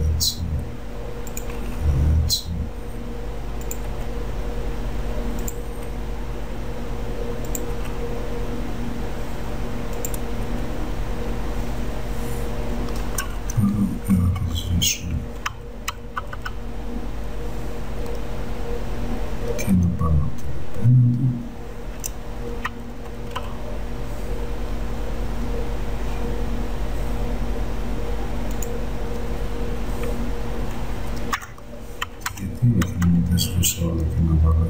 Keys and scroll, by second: 14.3 BackSpace, 15.6 space, 31.4 BackSpace, 32.2 space.